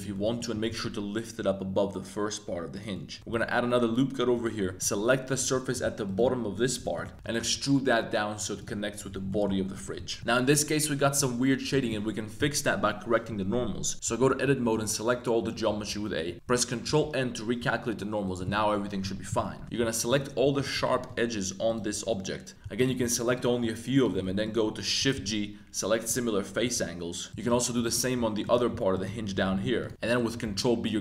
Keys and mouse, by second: 0.1 z, 0.1 middle click, 0.5 g, 0.7 z, 2.7 click, 2.9 middle click, 3.2 super+r, 4.3 click, 4.6-7.4 typing, 4.7 click, 4.8 middle click, 6.8 middle click, 7.1 middle click, 9.2 middle click, 9.7 middle click, 10.0 Tab, 10.2 shift+click, 11.0 click, 14.0 Tab, 14.4 a, 14.7 a, 16.3 a, 16.8 super+n, 17.6 Tab, 17.7 middle drag, 18.2 middle click, 19.4 middle click, 19.6 2, 20.0 alt+shift+right click, 20.6 alt+shift+right click, 20.8 z, 20.9 middle click, 21.6 shift+click, 22.1 middle click, 22.5 shift+g, 22.7 alt+click, 23.2 alt+shift+click, 23.9 shift+click, 24.1 z, 24.7 z, 25.1 shift+g, 26.6 z, 26.8 click, 27.3 alt+shift+super+z, 27.3 alt+shift+right click, 27.8 alt+shift+right click, 28.4 alt+shift+right click, 28.9 alt+shift+right click, 29.2 z, 29.5 shift+g, 29.9 z, 30.0 click, 30.4 super+b.